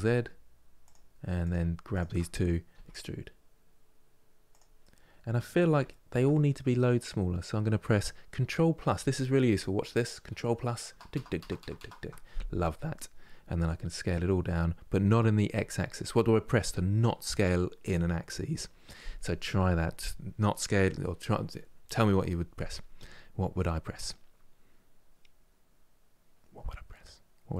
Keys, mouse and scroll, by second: 1.1-2.4 drag, 2.4 e, 4.5-9.0 middle drag, 10.6 KP_Add, 10.8 KP_Add, 13.2 s.